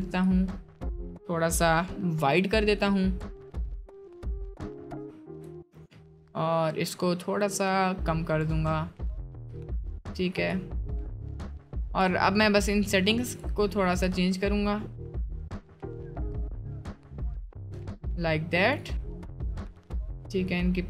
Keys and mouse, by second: 0.2-13.4 drag, 13.9-15.4 drag, 15.7-20.8 drag.